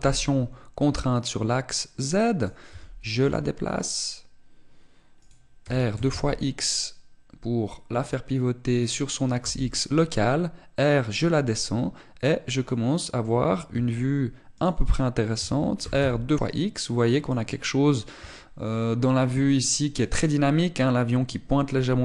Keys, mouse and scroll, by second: 0.2 r, 3.1 click, 3.3 g, 5.9 click, 6.3 r, 9.7 click, 10.1 g, 13.3 click, 14.3 g, 15.3 click, 16.0 r, 18.1 click.